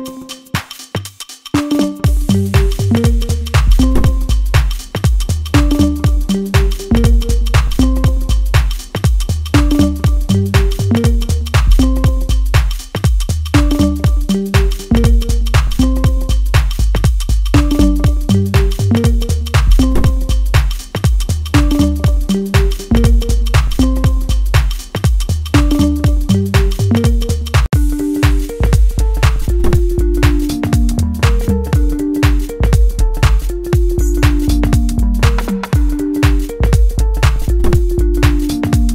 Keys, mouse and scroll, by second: 2.1-9.1 drag, 9.1-10.4 middle drag, 10.4-14.7 drag, 14.7-16.9 shift+middle drag, 16.9 scroll up 1, 17.6 shift+middle click, 18.7 scroll down 1, 19.3-21.3 drag, 21.3-22.8 middle drag, 22.8 click, 26.5 ctrl+z, 27.4-32.6 drag, 32.6 ctrl+z, 33.4-38.9 drag.